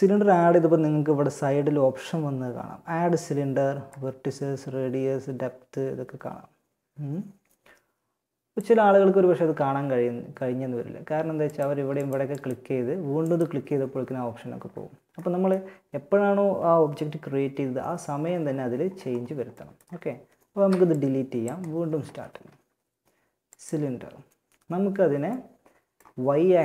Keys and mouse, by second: 3.0-4.8 drag, 10.9 a, 19.7 x, 21.4 shift+a.